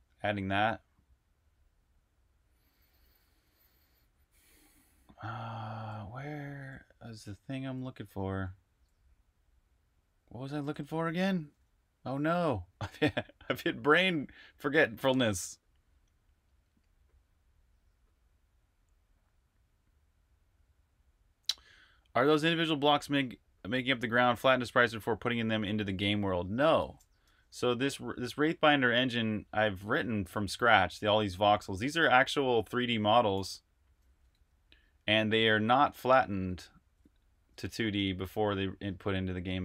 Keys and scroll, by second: 2.2-4.4 typing, 5.5-7.4 typing, 8.5 typing, 10.6 typing, 11.2 super+`, 27.0 super+r, 27.4-28.3 typing, 27.5 super+h, 31.5-39.3 typing.